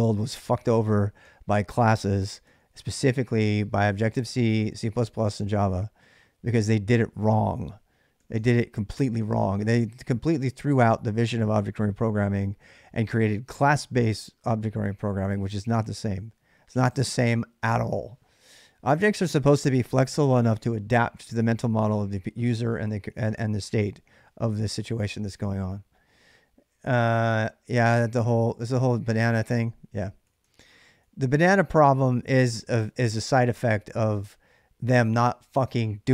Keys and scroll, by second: 1.0 k, 2.1 j, 2.3 j, 2.9 j, 8.0 k, 8.2 k, 30.0 k, 30.2 k, 30.8 j, 31.0 j.